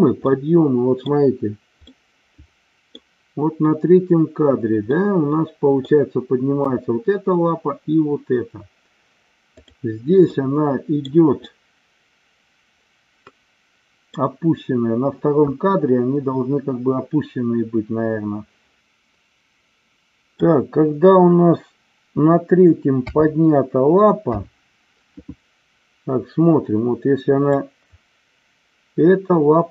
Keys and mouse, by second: 0.3 middle click, 1.9-3.0 middle drag, 4.9 middle click, 9.5 click, 10.3-11.0 middle drag, 11.5-14.1 middle drag, 18.8-20.4 middle drag, 22.9 KP_5, 24.2 KP_3, 27.5-29.7 drag.